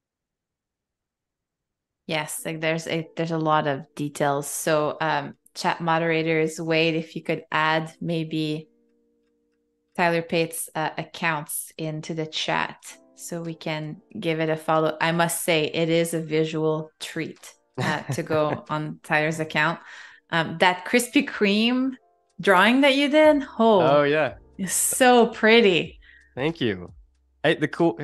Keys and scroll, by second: 1.8 a, 3.1 super+c, 4.1 super+f, 5.2 v, 10.8 super+7, 18.0 a, 18.9 super+c, 20.0 super+f, 20.3 v, 22.7 super+7, 27.0 a.